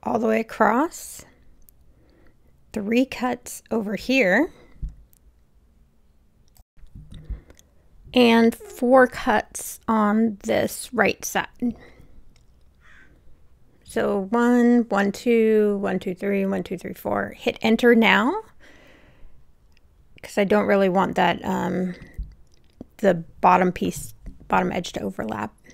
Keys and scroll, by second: 6.4 Return, 6.7 super+z, 20.4 super+z, 21.1 Return, 24.9 Return.